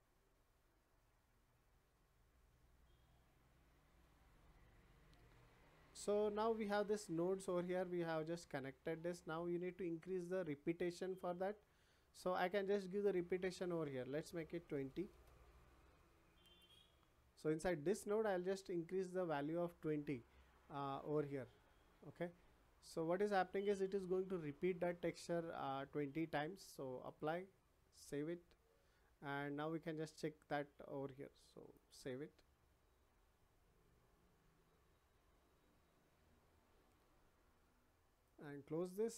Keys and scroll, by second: 14.5 2, 15.1 Return.